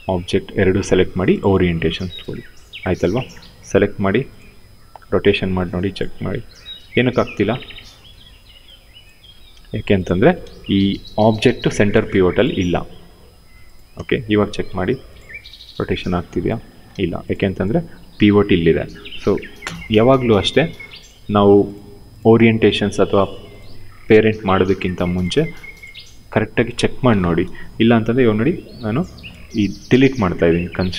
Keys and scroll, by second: 4.4 e, 5.9 ctrl+z, 6.5 w, 7.6 e, 8.9 ctrl+z, 9.2 q, 13.6 w, 14.9 e, 16.2 ctrl+z, 16.6 q, 17.2 w, 19.3 f, 30.4 Delete.